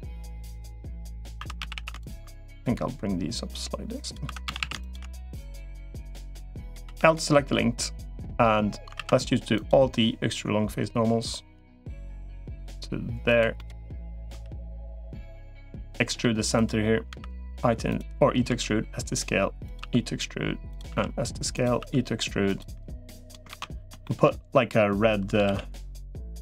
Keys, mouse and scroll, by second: 0.0 middle click, 0.8 middle click, 1.3 2, 1.5 a, 2.5-4.1 drag, 4.1 2, 4.3 a, 5.1-6.1 drag, 6.7 l, 8.7 alt+e, 13.4 middle click, 14.3 3, 15.3 click, 15.8 middle click, 16.9 e, 18.3 s, 19.7 e, 20.7 s, 21.7 e, 22.5 e, 23.3 ctrl+z, 23.8 shift+middle click, 25.3 ctrl+r.